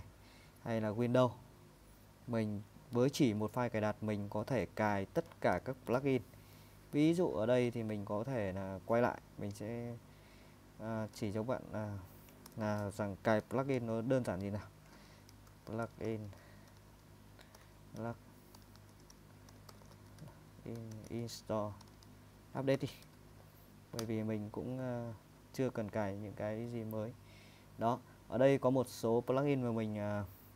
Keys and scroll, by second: 2.7 Down, 3.1 Up, 3.4 Up, 3.8 Down, 4.4 Down, 4.6 Down, 5.5 shift+;, 7.7 BackSpace, 11.2 super+Tab, 12.5 :, 15.2-23.2 typing, 24.0 Return.